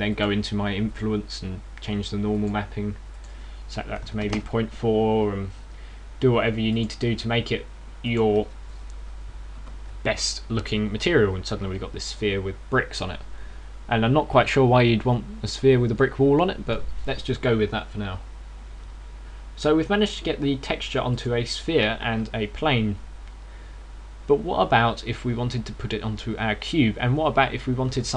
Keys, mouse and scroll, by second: 27.3 Escape.